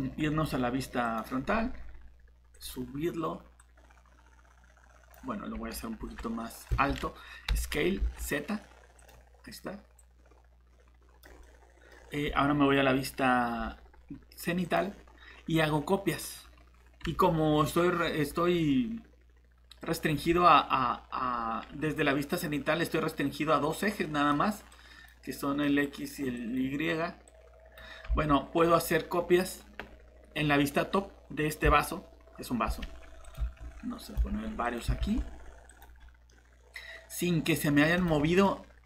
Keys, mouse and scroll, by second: 1.0 click, 5.5 s, 6.0 z, 6.7 Escape, 7.5 s, 8.0 z, 11.4 middle click, 11.9 scroll down 1, 14.6 click, 28.1 alt+Tab, 30.6 scroll down 1, 30.8 scroll up 1, 33.2 click, 33.6 shift+d, 34.3 shift+d, 35.0 shift+d, 36.3 middle click, 38.0 click, 38.2 middle click.